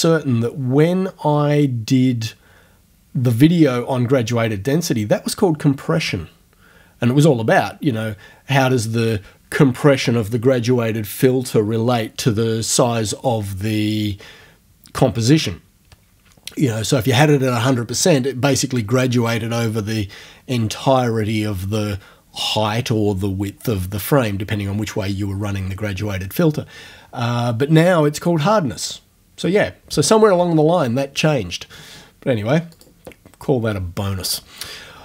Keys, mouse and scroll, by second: 32.7 click.